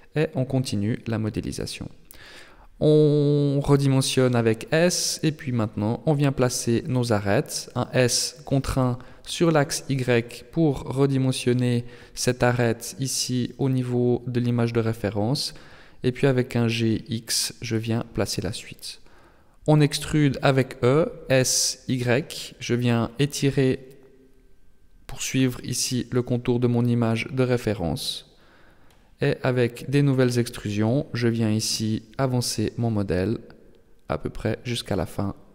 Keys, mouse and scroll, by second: 0.0 scroll up 3, 1.1 s, 5.0-5.7 scroll up 2, 5.7 right click, 6.2 shift+right click, 7.8 s, 11.5 g, 13.6 right click, 13.9 shift+right click, 14.7 g, 17.4 e, 20.8 s, 24.7 e, 27.0 s, 29.3 right click, 29.8 shift+right click, 31.4 e, 34.3 s.